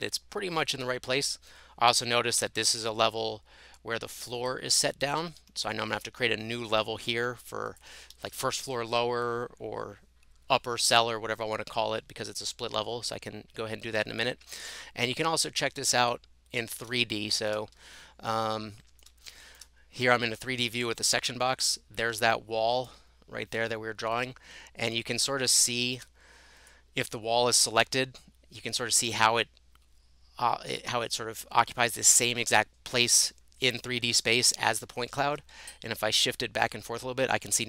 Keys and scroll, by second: 2.2-3.3 typing, 5.2 Escape, 5.4 Escape, 7.2 Escape, 8.5 Delete, 35.7 Right, 36.2 Right.